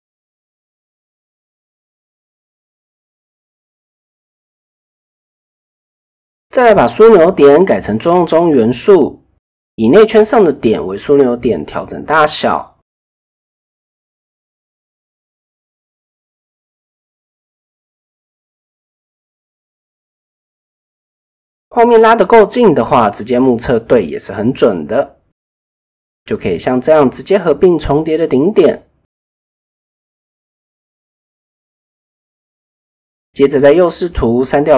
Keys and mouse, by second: 1.0 g, 2.6 g, 3.5 KP_1, 5.0-6.5 drag, 7.0-7.6 drag, 8.3 shift+middle click, 8.6 middle click, 9.4 shift+click, 10.4 KP_1, 11.4 shift+middle click, 12.6 KP_3, 13.4 shift+middle click, 14.6 s, 17.6 shift+click, 18.7 shift+middle click, 19.5 shift+middle click, 20.5 shift+click, 21.7 s, 25.1 shift+click, 26.1-28.3 typing, 30.6 shift+middle click, 31.3 middle click, 32.7 KP_3, 33.4 shift+middle click, 34.3 click.